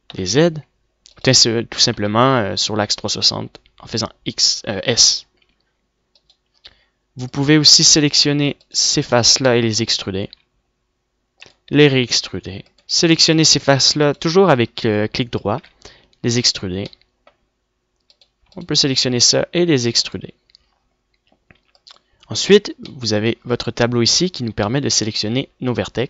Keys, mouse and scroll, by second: 3.4 s, 8.9 a, 10.9 middle click, 11.7 e, 13.3 e, 14.9 click, 17.2 e, 18.2 click, 19.7 middle click, 20.8 e.